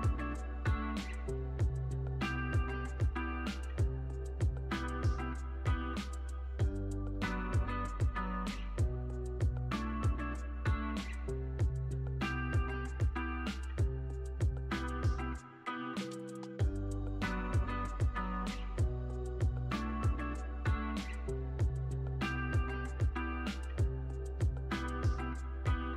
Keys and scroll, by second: 10.5 super+s, 12.1 space, 17.8 space.